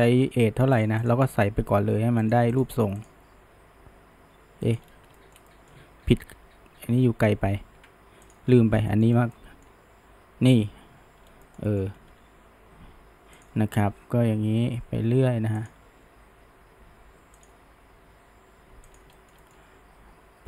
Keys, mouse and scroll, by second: 0.3 g, 1.0 click, 1.5 g, 2.6 click, 3.0 click, 3.3 g, 4.9-5.2 scroll down 1, 5.2 shift+middle click, 5.9 ctrl+z, 6.1-7.1 ctrl+z, 7.2 ctrl+z, 7.4 ctrl+z, 8.3 drag, 8.5-8.9 scroll up 1, 8.9 shift+middle drag, 9.1 scroll down 1, 9.4-11.3 middle drag, 11.3 scroll up 1, 11.5-12.1 shift+middle drag, 12.1 e, 13.9 e, 19.2-19.8 shift+middle drag, 19.8 e.